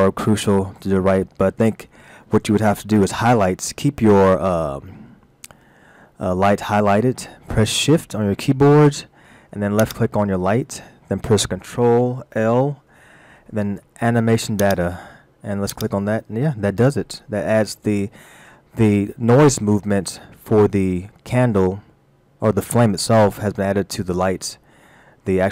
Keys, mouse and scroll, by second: 0.4-0.8 scroll up 1, 9.8 shift+click, 12.3 ctrl+l, 15.7 click, 24.8 middle click.